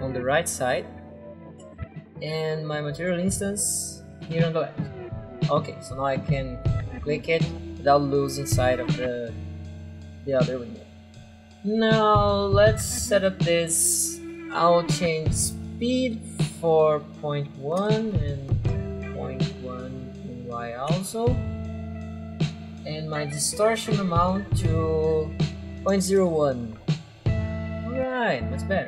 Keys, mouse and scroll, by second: 0.2 click, 2.0 alt+Tab, 3.1 alt+click, 4.5 click, 6.8 click, 10.9 click, 12.0-12.7 scroll down 4, 15.0 click, 17.2-18.0 typing, 18.8 Tab, 20.3-21.1 typing, 20.6 click, 23.4 click, 25.6-26.5 typing.